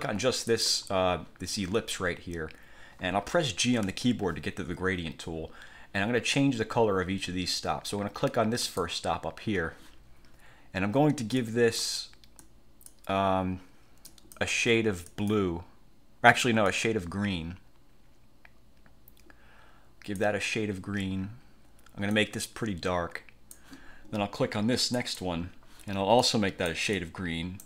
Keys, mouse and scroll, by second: 0.6 click, 4.0 g, 8.8 click, 11.5 click, 12.6 click, 14.2 click, 15.2 click, 16.8-20.5 drag, 22.2-23.8 drag, 25.0 click, 26.3 click.